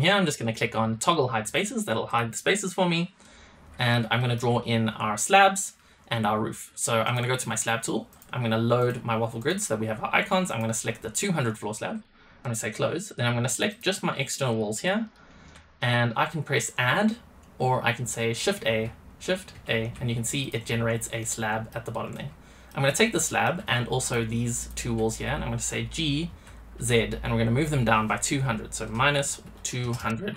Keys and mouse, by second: 1.1 click, 3.1-3.8 middle drag, 4.1 shift+middle click, 8.0-8.7 drag, 9.3-11.9 drag, 12.3 middle click, 13.0 drag, 13.6 shift+click, 14.5-15.5 shift+drag, 19.5 shift+a, 20.4 click, 21.1-21.6 middle drag, 22.0-22.6 middle drag, 23.2 middle click, 24.0-24.6 shift+drag, 26.2 g.